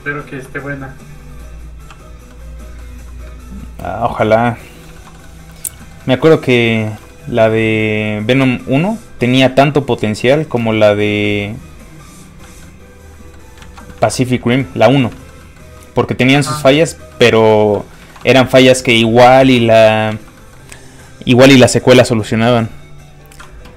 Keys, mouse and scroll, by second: 0.3 f, 0.4 click, 1.9 f, 2.0 click, 2.3 middle click, 3.3 ctrl+click, 4.4 click, 4.5 middle click, 4.9 shift+middle click, 5.1 middle click, 5.2 middle click, 5.8 shift+middle click, 6.0 middle click, 6.7 shift+middle click, 8.4 shift+space, 10.4 shift+click, 10.5 shift+space, 11.2 ctrl+click, 12.6 click, 12.7 middle click, 13.6 ctrl+z, 14.3 middle click, 14.4 shift+middle click, 15.4 middle click, 15.5 middle click, 15.6 scroll up 1, 15.7 middle click, 17.8 shift+scroll down 1, 17.9 shift+middle click, 19.3 ctrl+shift+Tab, 19.7 middle click, 19.8 middle click, 20.1 alt+shift+z, 20.3 middle click, 22.1 click.